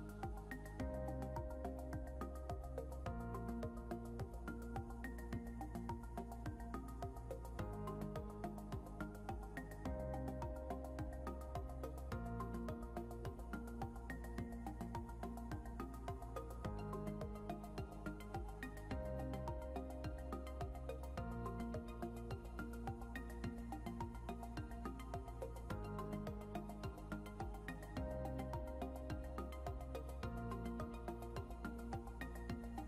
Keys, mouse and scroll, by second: 3.5 scroll up 1, 7.4 scroll down 1, 13.6 shift+click, 14.2 shift+click, 16.2 double click, 18.0 scroll down 1, 19.1 scroll up 1, 20.7 double click, 22.8 scroll down 1, 23.6 scroll up 1, 30.5 scroll down 1, 32.3 scroll up 1.